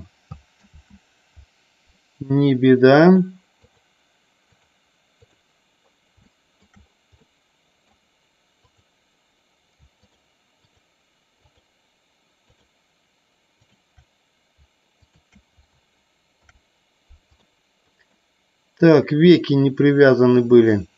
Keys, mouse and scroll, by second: 0.9 ctrl+z, 3.1 click, 4.8 click, 6.4 shift+middle click, 7.4 middle click, 10.8 shift+click, 11.6 shift+click, 12.6 shift+click, 15.2 shift+click, 16.5 ctrl+p, 18.3-20.9 middle drag.